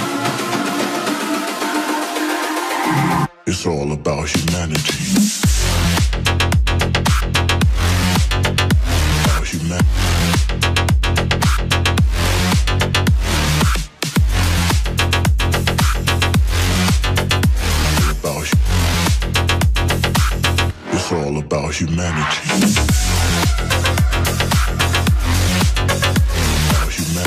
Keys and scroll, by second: 0.9 Return.